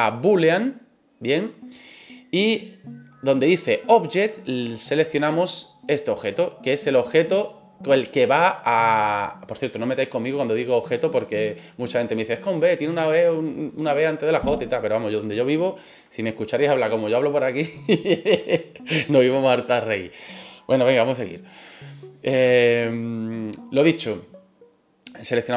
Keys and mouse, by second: 4.8 click.